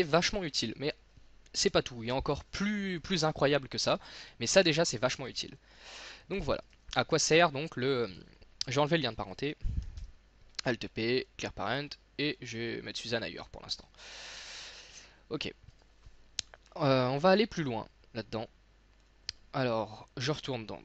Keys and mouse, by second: 6.3 x, 8.1 right click, 10.0 alt+p, 15.7-18.9 middle drag.